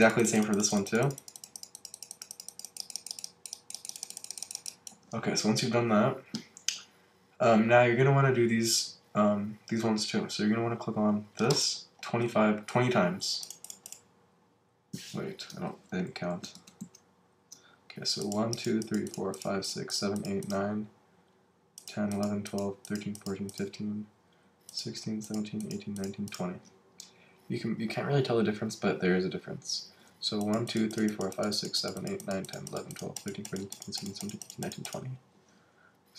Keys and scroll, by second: 15.7 super+z, 16.3 alt+super+z.